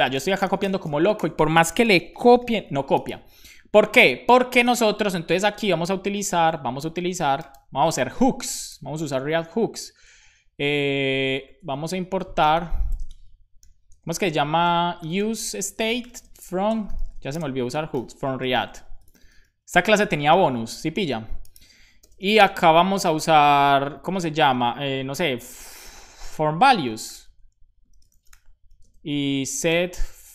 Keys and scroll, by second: 5.5 Return, 6.3 Up, 7.1-7.9 typing, 11.5 super+Left, 11.7 Return, 12.0 Up, 12.2-16.5 typing, 18.4 BackSpace, 19.6-20.8 typing, 22.1 space, 22.4 space, 22.4 [, 22.4 ], 22.5 Left, 23.0 Left, 26.7-30.3 typing.